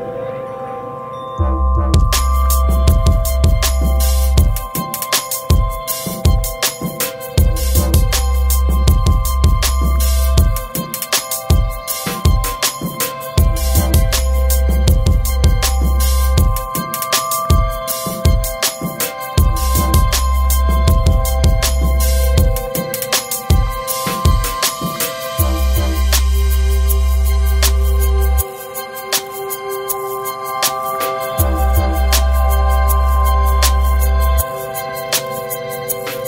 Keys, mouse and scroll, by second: 0.5 right click, 2.4 scroll down 1, 2.7 right click, 10.1 click, 13.8 Escape, 15.0 right click, 16.3 click, 18.5-19.5 scroll up 1, 19.6 click, 21.7 right click, 22.5-23.0 scroll down 1, 23.3 click, 23.6 right click, 27.2 click, 30.3 click, 35.9 right click.